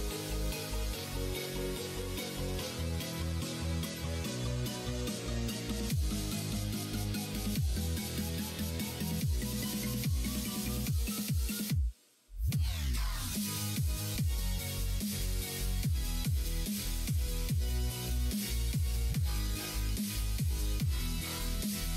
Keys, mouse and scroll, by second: 2.8 middle click, 3.4 shift+middle click, 4.0 click, 5.2 click, 6.7 ctrl+z, 7.4 ctrl+r, 12.8 alt+click, 13.8 ctrl+f, 15.7 middle click, 17.7 alt+click, 18.6 ctrl+f, 20.0 click, 20.6 middle click, 21.3 click, 21.6-21.9 middle drag.